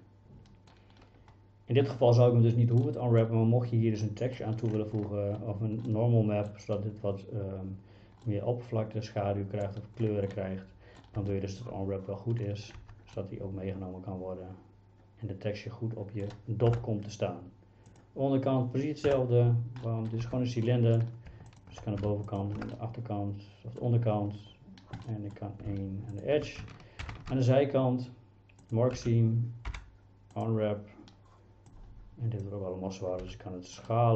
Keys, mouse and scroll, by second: 2.9-3.2 middle drag, 4.1-4.4 middle drag, 5.9-6.5 middle drag, 8.3-9.7 middle drag, 10.4-11.0 middle drag, 11.2 Tab, 12.8 Tab, 13.2-16.3 middle drag, 16.7 KP_Divide, 18.0 click, 19.1 KP_Divide, 19.9 middle drag, 20.3 Tab, 20.7 middle click, 21.6 alt+click, 22.4 click, 22.8-23.8 middle drag, 25.1 middle click, 27.1 ctrl+e, 29.0 a, 29.7 u, 31.7 click, 33.3 s.